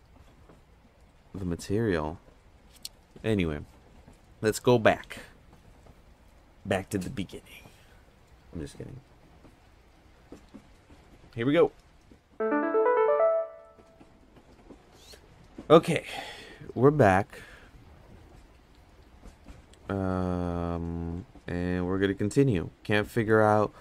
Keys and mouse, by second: 19.9 click, 21.1 click, 22.5 click.